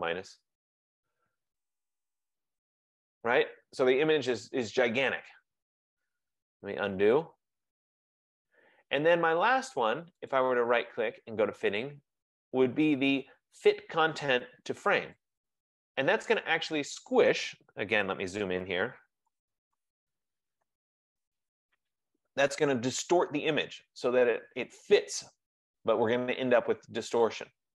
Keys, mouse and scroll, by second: 0.0 ctrl+-, 0.4 ctrl+-, 0.7 ctrl+-, 0.9 ctrl+-, 6.8 ctrl+z, 10.5 right click, 15.5 click, 16.5 middle click, 18.7 ctrl+=, 18.9 ctrl+=, 19.4 ctrl+=, 19.8 ctrl+=, 20.7 ctrl+0.